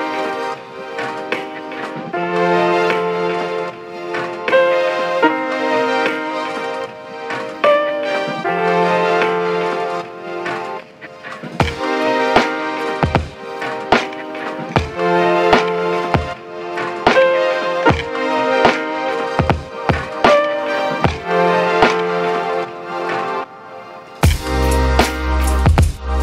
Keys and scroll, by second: 0.6 f, 3.0-3.4 typing, 4.8 8, 4.9 Return, 6.4 6, 6.5 Return, 8.2-9.0 typing, 14.3-15.7 typing.